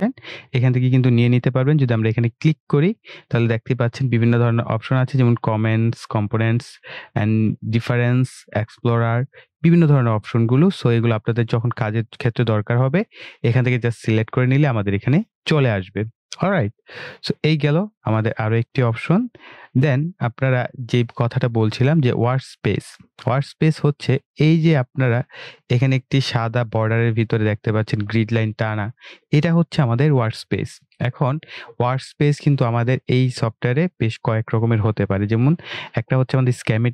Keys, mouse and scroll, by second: 2.0 click, 16.6 click, 16.6 typing.